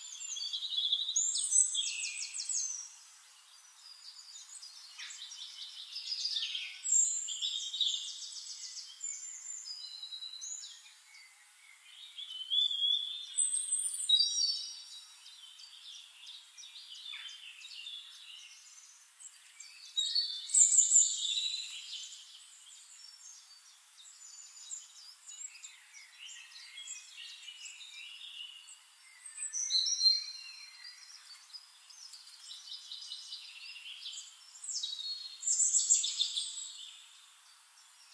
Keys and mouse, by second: 0.4-2.5 drag, 3.7 click, 4.9-8.4 drag, 8.5 click, 9.7 click, 11.4 ctrl+click, 14.4 click, 15.8-20.0 drag, 20.4-24.0 drag, 21.6-24.0 shift+right drag, 22.0-24.0 shift+middle drag, 24.7 click, 25.8 click, 27.1 click, 30.1 click, 31.8 ctrl+click, 32.6 Return, 34.5-37.5 drag.